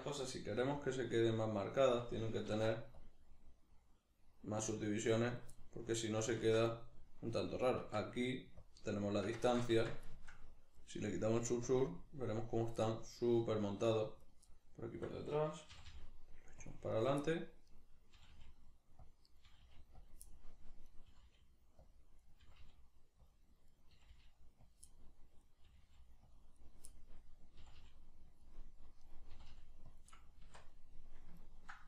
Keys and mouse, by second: 0.6 g, 1.9 click, 2.5 ctrl+r, 5.3 right click, 5.5-8.6 middle drag, 6.4 Tab, 7.8 Tab, 8.6-10.1 shift+drag, 9.5 ctrl+z, 10.1-11.7 shift+middle drag, 11.7-12.8 drag, 12.8-14.2 middle drag, 14.2 right click, 14.5-16.7 middle drag, 15.7 g, 16.7 click, 16.9 right click, 17.3 middle click, 17.7 right click, 18.1 g, 19.1 click, 19.3 right click, 19.5 g, 20.1 click, 20.3 middle click, 20.9 right click, 21.1 g, 21.9 click, 22.2 right click, 22.4 g, 23.3 click, 23.7 right click, 23.9 g, 24.7 click, 24.9 middle click, 25.4 right click, 25.7 g, 26.4 click, 26.6 right click, 26.9-28.4 middle drag, 27.6 g, 28.4 click, 28.6 middle click, 29.0 right click, 29.3 g, 30.0-31.8 middle drag, 30.0 click, 30.5 Tab.